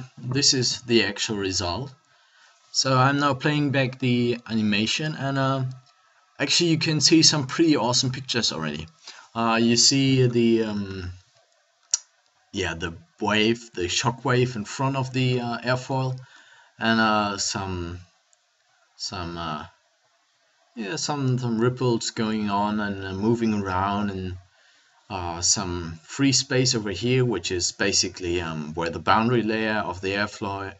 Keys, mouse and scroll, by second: 1.5 alt+a, 14.8 middle click, 16.0 middle click.